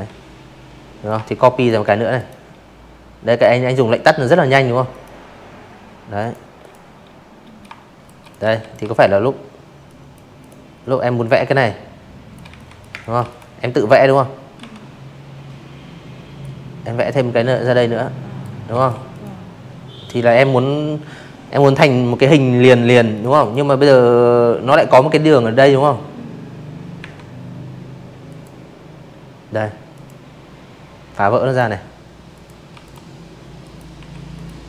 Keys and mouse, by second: 1.9 click, 3.2 click, 3.6 click, 4.6-5.0 shift+drag, 5.2 click, 5.4 z, 5.5 click, 5.8 v, 5.9 drag, 6.8 click, 7.3 click, 8.2-9.3 shift+drag, 9.4 z, 9.5 click, 9.9 space, 10.0 click, 10.1 v, 10.2 click, 11.6 m, 13.4-15.4 drag, 15.7 v, 15.7 click, 16.1 click, 20.0 v, 20.1 click, 20.4 click, 24.0 a, 25.3 click, 26.9 click, 28.4 click, 29.3 click, 29.7 v, 29.8 click, 30.6 click, 30.9 Delete, 31.3 click, 32.1 click, 33.5 a, 34.0 click.